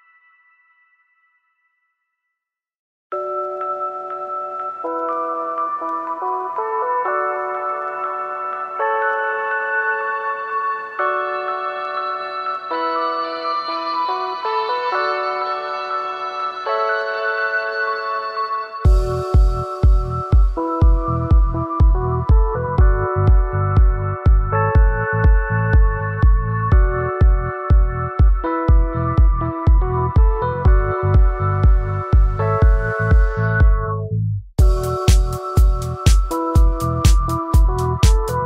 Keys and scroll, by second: 3.8 ctrl+z, 14.4 ctrl+z, 22.7 ctrl+z, 28.7 ctrl+z, 33.9 ctrl+z.